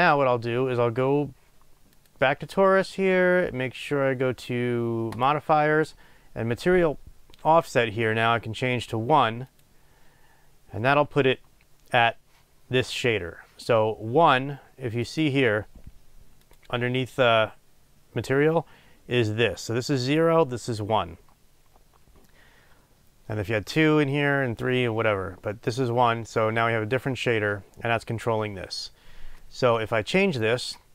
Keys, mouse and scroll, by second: 9.9-30.9 drag.